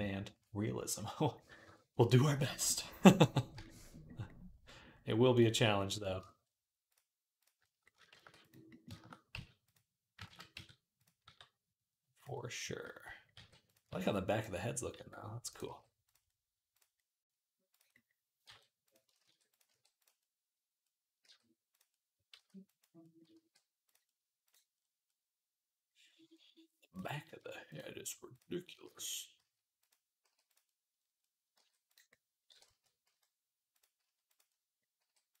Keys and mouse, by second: 1.1-2.5 middle drag, 2.5 middle click, 3.1 shift+middle click, 4.4-11.0 middle drag, 7.9 shift+d, 9.1 s, 10.1 ctrl+z, 10.3 s, 11.0-13.0 drag, 11.0 g, 13.1 g, 13.7 s, 14.7 r, 15.4 g, 16.1-17.9 drag, 18.2 g, 19.0 shift+d, 19.5 r, 20.0-21.1 drag, 21.0 g, 21.1-24.6 middle drag, 22.1 s, 23.1 r, 24.6 click, 25.5-27.5 middle drag, 27.5 click, 27.7-31.3 middle drag, 28.6 shift+d, 29.2 s, 30.0 g, 31.3 g, 32.3 r, 33.8 s, 33.9-35.4 drag, 34.8 g.